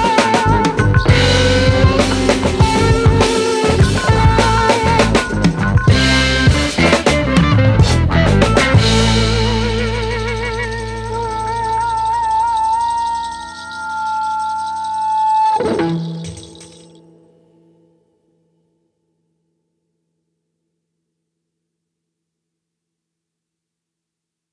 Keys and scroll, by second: 8.6-10.6 typing, 11.9-13.0 typing, 13.2 Return.